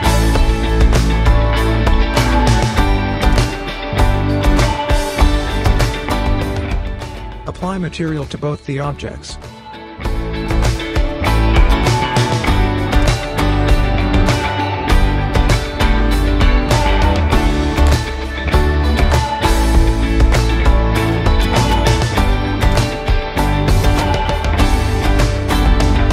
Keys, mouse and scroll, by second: 0.1-1.7 right drag, 3.5 click, 7.2 right click, 8.2 click, 10.2-12.2 typing, 15.0-15.6 drag, 18.4 click, 21.6 scroll down 1, 21.9-22.3 scroll up 1, 22.3 click, 22.5-22.9 scroll up 1, 22.9-23.5 click, 23.5 scroll down 1, 24.3-25.0 alt+middle click, 25.2-26.1 alt+click.